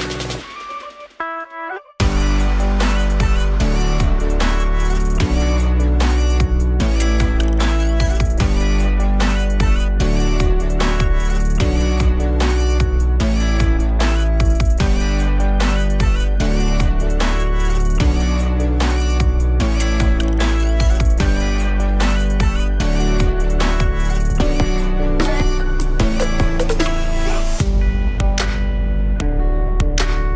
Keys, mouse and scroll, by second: 1.0 click, 2.2 click, 8.2-9.4 drag, 11.6-12.8 drag, 12.8 KP_0, 18.4 click, 24.5-28.6 drag, 29.0 click, 30.0 KP_0.